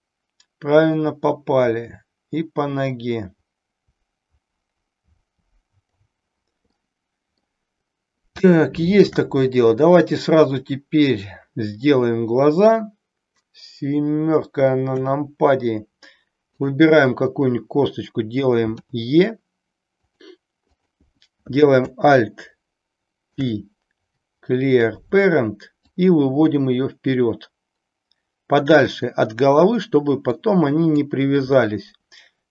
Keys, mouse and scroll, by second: 6.8 middle click, 8.5 shift+middle click, 14.9 KP_7, 16.5 click, 18.8 e, 20.0 click, 20.6 click, 23.3 alt+p, 25.8-28.9 drag, 30.3 click.